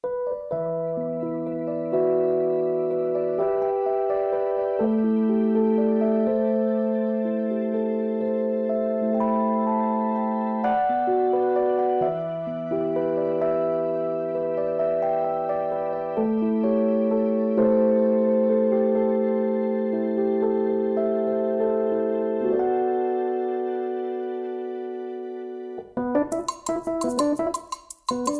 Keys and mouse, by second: 6.6 Right, 8.7-21.6 alt+drag, 23.7 shift+click, 25.7 shift+click.